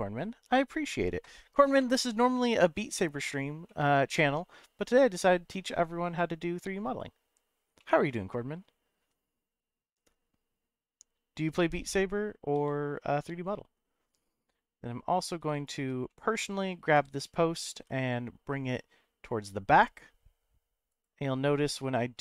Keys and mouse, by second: 3.8-6.3 middle drag, 7.9 middle click, 9.0 3, 12.5 w, 15.1 click, 15.7 shift+click, 16.1 middle click, 16.9 g, 17.7 y, 20.9 right click.